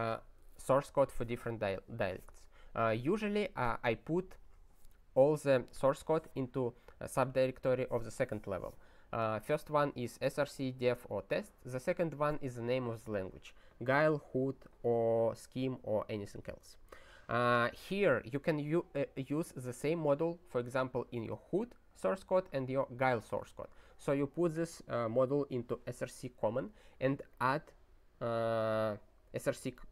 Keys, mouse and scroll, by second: 24.5 click, 25.4 click, 27.3 click.